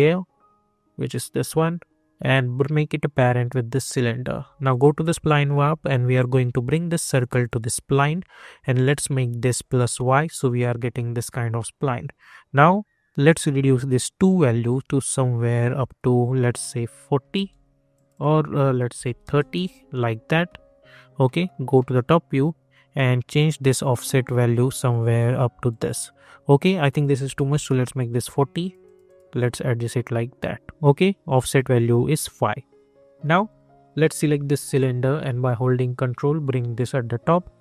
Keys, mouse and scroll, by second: 1.0-8.7 drag, 11.2 scroll down 1, 13.2-16.6 drag, 19.5 Return, 21.2 middle click, 22.3 scroll up 1, 23.7 click, 27.6 Return, 28.6 click, 33.4 click, 35.4-37.6 ctrl+drag.